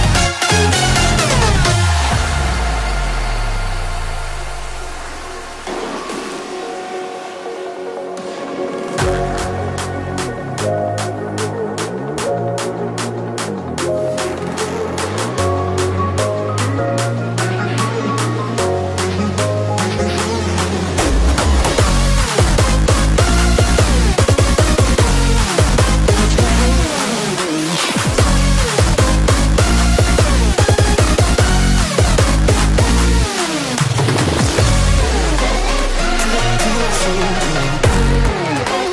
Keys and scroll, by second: 11.8 ctrl+Return, 13.6 l, 20.9 ctrl+j, 26.3 space.